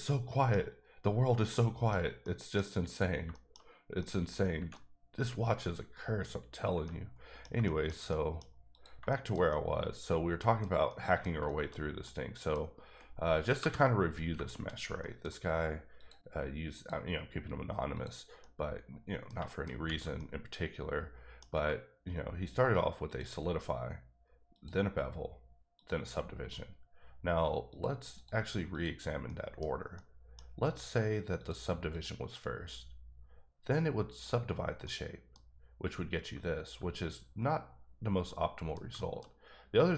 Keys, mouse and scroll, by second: 1.9 shift+scroll down 2, 2.2 middle click, 2.9 click, 3.3 shift+middle click, 3.6-4.0 scroll up 2, 4.0 middle click, 4.5 Right, 4.7 middle click, 6.1 scroll up 1, 6.4-6.7 scroll down 2, 6.8 middle click, 8.7 click, 9.1 shift+middle click, 10.9 middle click, 11.5 shift+middle click, 14.5 shift+middle click, 14.7-15.0 shift+scroll up 3, 15.2 middle click, 16.0 click, 16.7 click, 17.9 click, 18.4 middle click, 19.7 scroll up 1, 20.1 middle click, 23.0 click, 24.6 click, 26.4 click, 27.7 click, 28.1 click, 28.7 click, 29.2 middle click, 29.6 scroll down 2, 29.9 middle click, 31.3 click, 31.9 click, 34.1 click, 34.8 middle click, 35.4 scroll up 2, 38.2 middle click, 39.3-39.9 scroll up 2.